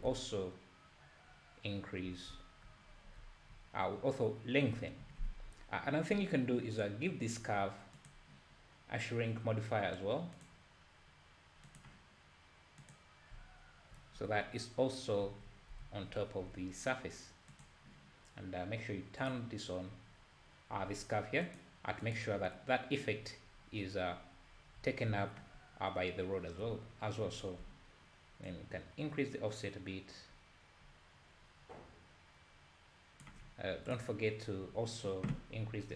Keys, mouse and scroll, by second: 0.1 `, 2.3 `, 3.4 `, 10.5-11.9 drag, 14.2 z, 15.4 z, 17.6 click, 19.2 click, 21.5 click, 22.0 click, 24.8 `, 25.6-26.0 scroll up 2, 27.4-28.1 scroll down 2, 28.6-31.5 shift+drag, 34.0 click.